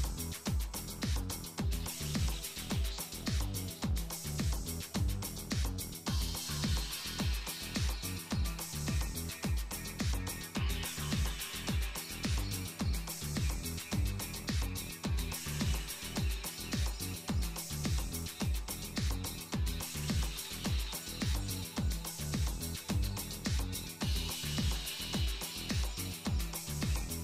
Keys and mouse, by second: 4.0-5.1 drag, 5.0 right click, 5.3 right click, 7.8 z, 8.7 z, 9.5 z, 9.7 right click, 10.0 Tab, 10.4 Tab, 11.2 shift+d, 12.3-16.2 drag, 15.2 z, 16.2-17.0 middle drag, 16.4 g, 19.5-20.6 middle drag, 20.0 z, 21.2 g, 24.8 Tab, 25.9 KP_Divide, 26.9 KP_7.